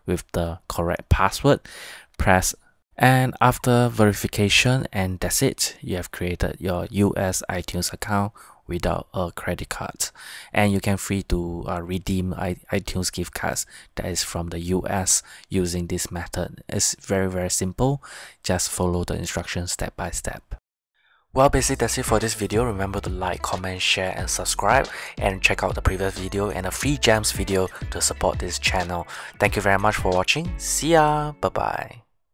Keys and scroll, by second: 2.3 Tab, 14.1 Tab, 18.7 Tab.